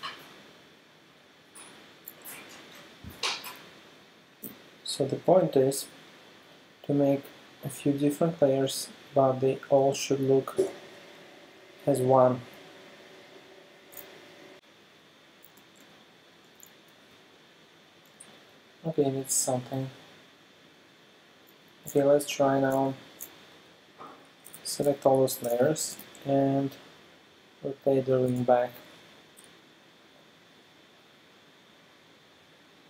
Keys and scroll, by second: 4.5 v, 9.9 space, 10.7 super+space, 12.5 alt+super+space, 15.6 super+space, 23.0 alt+super+space, 25.9 shift+super+t, 26.5 super+t.